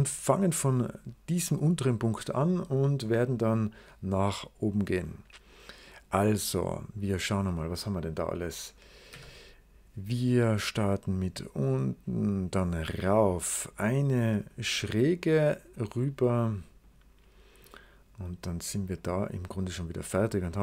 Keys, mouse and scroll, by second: 5.4 right click, 6.3 click, 7.9 click, 9.0 s, 10.6 click, 11.8 click, 12.9 click, 14.4 click, 15.6 click, 16.7 click, 17.4 click, 18.8 click, 20.4 click.